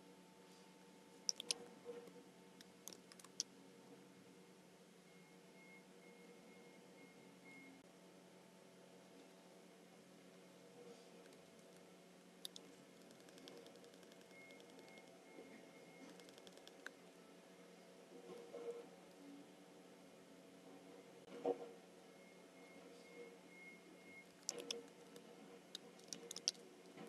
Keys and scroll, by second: 1.7 super+c, 3.2 alt+super+b, 13.0 Right, 16.1 Right, 16.9 Right, 24.6 super+c, 26.4 alt+super+b.